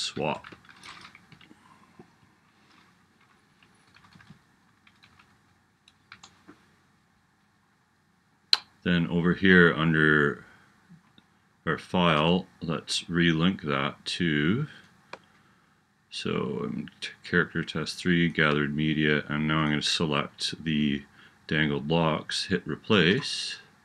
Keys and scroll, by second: 0.0-1.1 typing, 1.4 Right, 3.7 BackSpace, 6.2 Return.